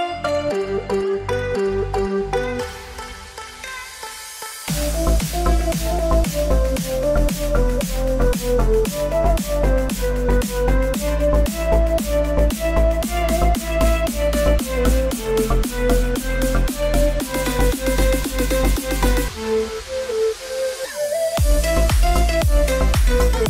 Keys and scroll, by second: 21.4 space.